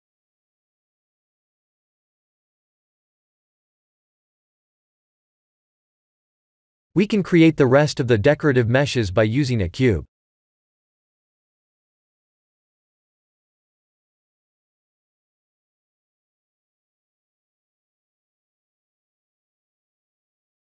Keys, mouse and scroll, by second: 1.4 click, 1.9 middle click, 2.5-3.7 scroll down 6, 3.7 middle click, 3.7-4.4 scroll down 2, 4.9-5.7 scroll down 1, 6.0 shift+middle click, 7.2 click, 7.6 shift+a, 12.3 s, 14.4 s, 16.6 KP_3, 17.7 g.